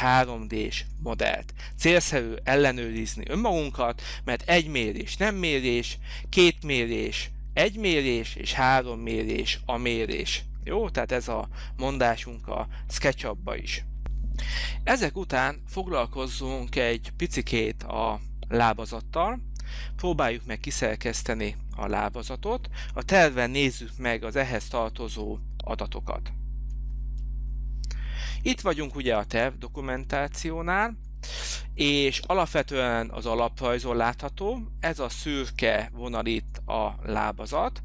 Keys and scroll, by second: 26.7 alt+Tab.